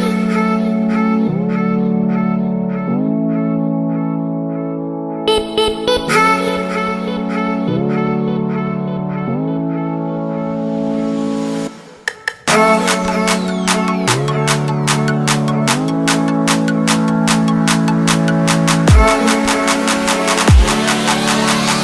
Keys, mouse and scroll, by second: 1.1 right click, 1.9 click, 4.6-8.0 ctrl+scroll up 9, 8.5 ctrl+scroll up 1, 9.2 right click, 10.4 click.